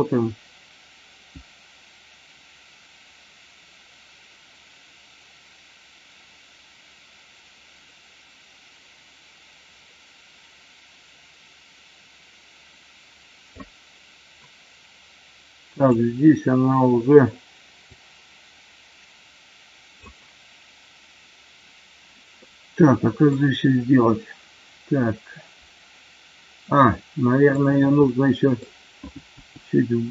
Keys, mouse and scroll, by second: 0.0-13.6 drag, 15.7 click, 17.8-20.2 drag, 22.3-23.2 middle drag, 26.9-27.5 middle drag, 28.0 middle click, 29.3 g.